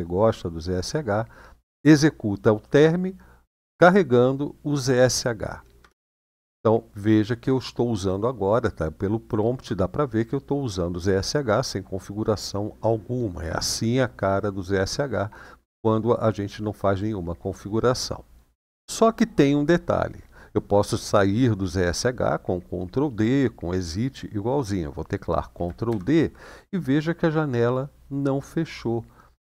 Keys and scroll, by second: 1.0 typing, 5.6 Return, 25.7 ctrl+d.